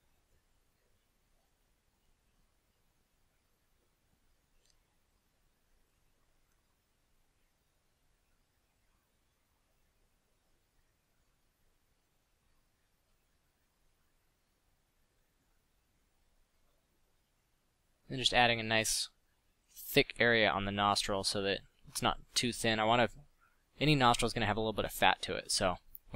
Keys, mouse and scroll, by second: 0.2 f, 5.8 f, 9.3 f, 16.6 f, 16.8 f.